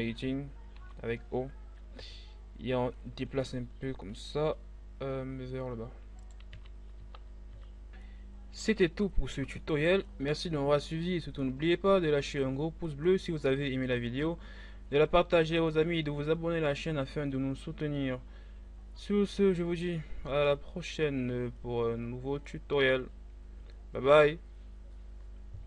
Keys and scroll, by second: 0.4 o, 6.2 z, 7.0 Tab, 7.5 a.